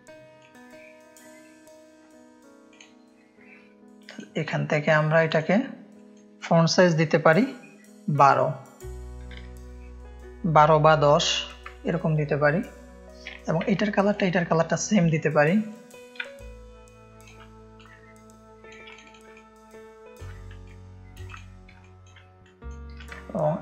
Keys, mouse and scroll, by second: 0.3 click, 0.5 shift+o, 4.0 click, 9.3 KP_1, 11.1 KP_2, 11.5 Return, 14.0 click, 15.6 click, 16.1-17.2 ctrl+drag, 16.2 ctrl+space, 17.7-18.6 shift+drag, 19.0 click, 19.3 ctrl+space, 19.3 ctrl+click, 20.6 click, 21.8 click, 21.8 space, 22.4 click, 23.0-23.6 alt+drag.